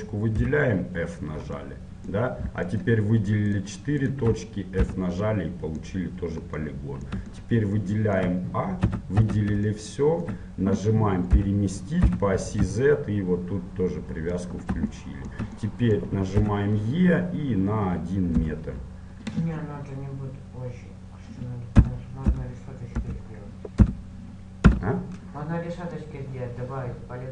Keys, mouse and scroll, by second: 0.5 f, 0.9-2.8 middle drag, 2.8-5.5 right drag, 5.0 f, 5.5 click, 5.5-9.3 middle drag, 8.9 a, 9.3 a, 9.9-11.7 middle drag, 11.4 g, 15.1-17.6 middle drag, 16.5 e, 26.1-27.3 middle drag.